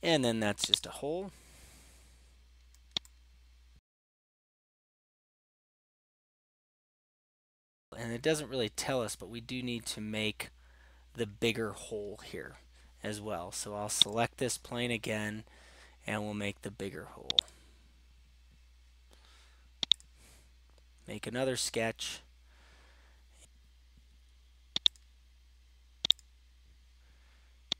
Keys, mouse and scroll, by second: 0.8-2.2 drag, 5.6 middle click, 5.7 right click, 7.9-8.6 scroll, 9.7-11.1 scroll, 14.1-18.9 drag, 20.0-21.1 drag, 25.0 click, 26.5 click.